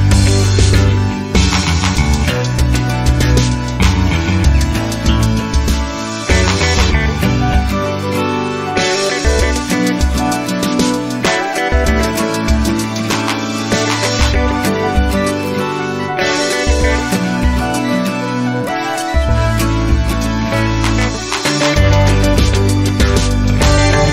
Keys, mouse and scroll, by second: 0.6 KP_5, 0.9 KP_0, 2.3 click, 4.9 click, 6.8 KP_0, 8.1 click, 9.4 KP_Subtract, 9.7 KP_2, 9.9 KP_5, 11.6 click, 13.9 click, 16.0 click, 17.4 KP_Subtract, 19.6 click, 22.4 click.